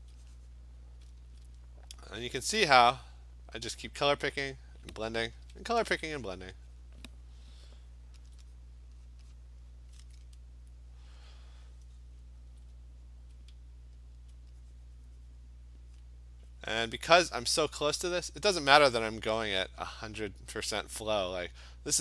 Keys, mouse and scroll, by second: 0.5 click, 1.3 alt+click, 2.2 click, 2.8-4.7 alt+click, 3.0 click, 3.3 click, 3.8 click, 4.1 click, 4.5 alt+click, 4.6 click, 5.5 ], 5.7 ], 5.8 ], 6.2 click, 6.4 click, 6.8 click, 8.3-8.6 alt+click, 8.6 click, 9.1 click, 9.3 click, 9.6 click, 12.3 alt+click, 14.2 alt+click, 16.0 click, 16.6 click, 17.1 click, 17.4 alt+click.